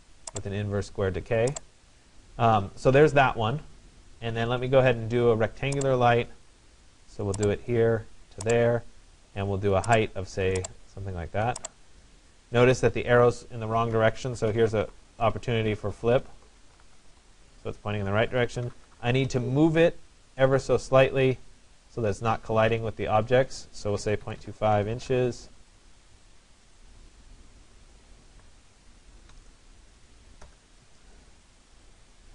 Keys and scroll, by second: 15.7-17.3 typing, 23.8 Delete, 24.2-25.0 typing, 25.0 shift+Return, 30.2 Return.